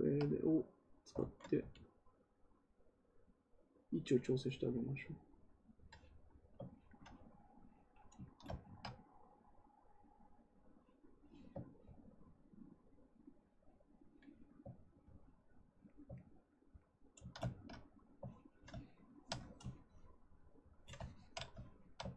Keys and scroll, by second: 1.1 ctrl+z, 1.5 x.